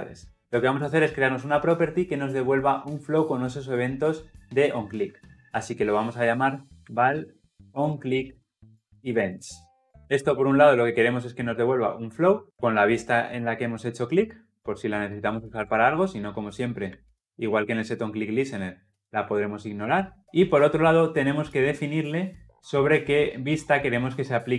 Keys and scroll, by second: 13.4 Escape, 15.4 Escape, 15.5 alt+Return.